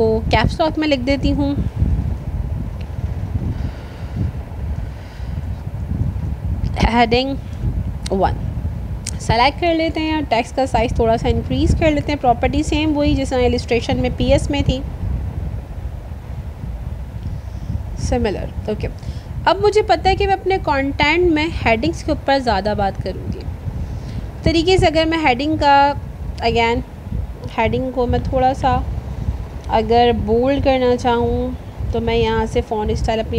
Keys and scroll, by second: 8.8 ctrl+a, 25.8 ctrl+a.